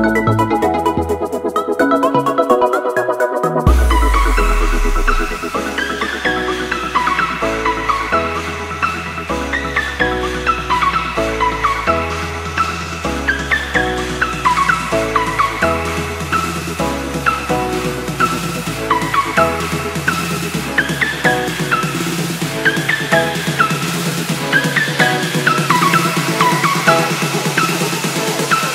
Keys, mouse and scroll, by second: 7.3 click, 14.2 u, 16.8 typing, 17.9-18.7 typing, 22.8 typing, 25.7 a, 25.9 click.